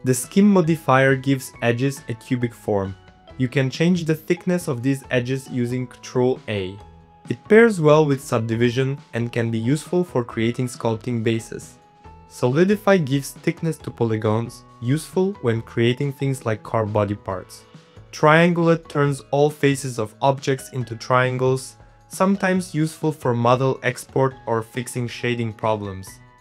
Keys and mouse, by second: 0.2 middle click, 1.6 middle click, 2.5 Tab, 2.7 middle click, 3.6 click, 3.7 middle click, 4.2 ctrl+a, 5.8 ctrl+a, 6.6 middle click, 6.8 Tab, 7.2 ctrl+3, 7.3 middle click, 7.5 Tab, 7.7 middle click, 8.1 z, 8.3 click, 8.6 middle click, 8.8 ctrl+a, 9.3 click, 9.8 ctrl+a, 10.3 click, 10.7 ctrl+a, 11.0 click, 11.3 ctrl+a, 11.5 middle click, 12.0 Tab, 12.2 middle click, 12.5 middle click, 13.4 click, 13.6 middle click, 14.8-16.3 drag, 16.7 middle click, 17.2-18.6 middle drag, 18.6 middle click, 18.9 middle click, 19.3 click, 19.5 middle click, 20.2 middle click, 20.8 click, 21.3 click, 21.7 click, 22.5 click, 22.8 click, 23.8 click, 24.3 middle click, 25.1 middle click, 25.5 middle click, 26.1 middle click.